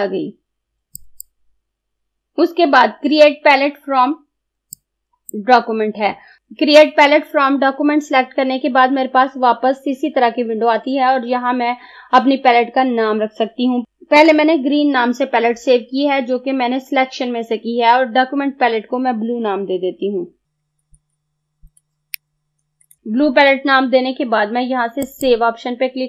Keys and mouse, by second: 1.0 click, 4.8-6.4 drag, 20.6 b, 21.8-23.6 typing, 25.1 click.